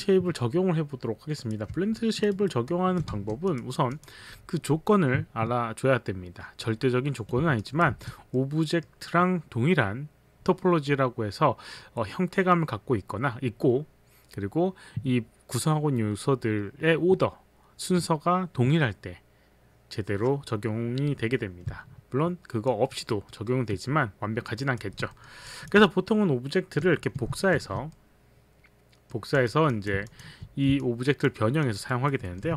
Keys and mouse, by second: 1.3 click, 2.0 alt+click, 2.4 alt+right click, 2.4 alt+click, 2.6 alt+click, 3.1 w, 7.6 alt+click, 7.9 w, 8.3 middle click, 8.8 middle click, 22.7 alt+click, 23.3 alt+middle click, 24.6 alt+click, 25.2 alt+middle click, 25.5 alt+click, 27.6 shift+d, 27.9 middle click, 29.3 click, 29.8 click, 30.1 alt+click, 30.8 alt+click, 31.1 alt+click, 31.7 alt+click, 31.9 alt+right click, 32.3 alt+middle click.